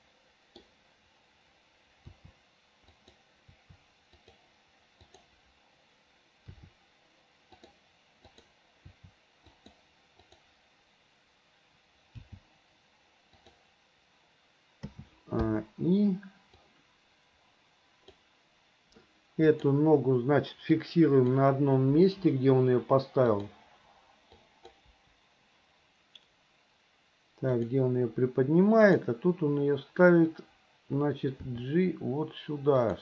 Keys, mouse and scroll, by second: 0.0-0.7 middle drag, 2.1 r, 3.5 r, 5.0 click, 6.5 r, 8.4 click, 8.9 r, 10.2 click, 12.2 g, 14.9 a, 15.4 i, 16.7-18.2 drag, 19.5 click, 21.0 click, 22.0 Delete, 23.4 click, 24.4-24.8 drag, 24.9 Delete, 27.6 click, 28.9 click, 31.4 g.